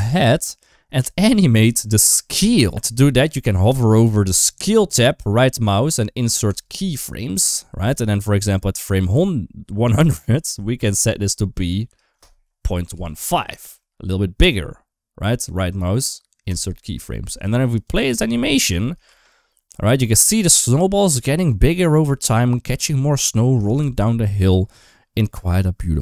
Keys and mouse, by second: 1.6 shift+middle click, 2.5 ctrl+z, 5.2-6.5 right drag, 8.5-9.9 drag, 11.4-13.0 drag, 15.3-16.4 right drag, 17.7 click, 18.3 middle click, 18.9 space, 23.5 shift+middle click.